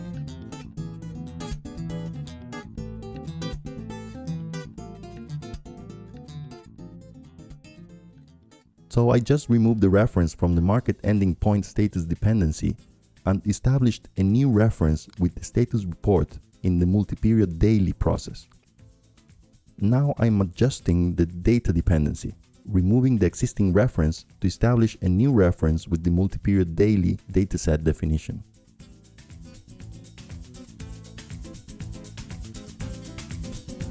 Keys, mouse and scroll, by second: 2.4-6.7 drag, 13.5-14.6 right drag, 16.5-18.9 drag, 19.7-29.1 drag, 23.0 ctrl+Left, 24.5 ctrl+Right, 24.8 ctrl+Right, 25.0 ctrl+Up, 25.2 ctrl+Up, 25.3 ctrl+Up, 25.5 ctrl+Up, 26.1 ctrl+Up, 26.3 ctrl+Up, 26.5 ctrl+Up, 26.7 ctrl+Left, 30.7-31.8 drag, 32.6-33.9 drag.